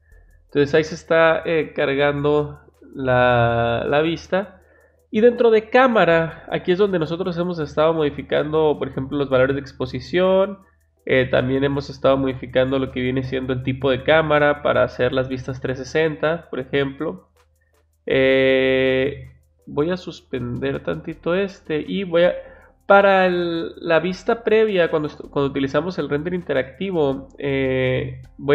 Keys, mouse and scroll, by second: 6.4 click, 6.9 click, 20.6 click, 27.6 click.